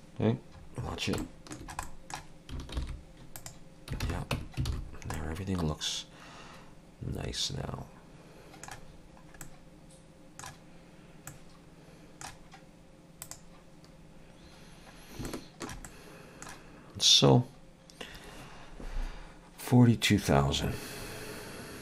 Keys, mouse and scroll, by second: 0.6 scroll up 3, 1.2 shift+middle click, 1.9 middle click, 2.8 alt+n, 4.1 alt+a, 4.3 Tab, 4.7 alt+a, 4.9 scroll down 3, 5.2 middle click, 8.9-9.4 scroll down 4, 9.4 middle click, 11.3 middle click, 13.2 click, 14.6-15.2 scroll up 2, 15.3 shift+middle click, 15.9 middle click, 17.6 scroll down 1.